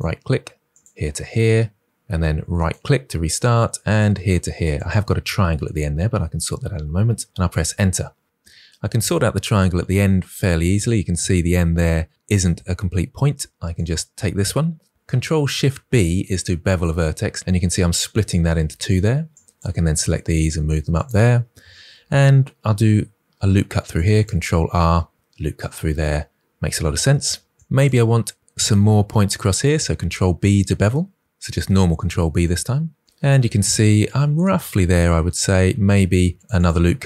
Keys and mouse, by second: 0.6 click, 2.4 right click, 3.8 click, 4.5 click, 7.2 Return, 9.7 shift+middle click, 15.7 ctrl+alt+b, 19.2 click, 19.7 g, 21.7 ctrl+r, 23.8 click, 24.0 click, 27.5 2, 29.4 ctrl+b, 32.3 click, 35.8 ctrl+middle click, 35.9 ctrl+r, 36.3 click, 36.6 click.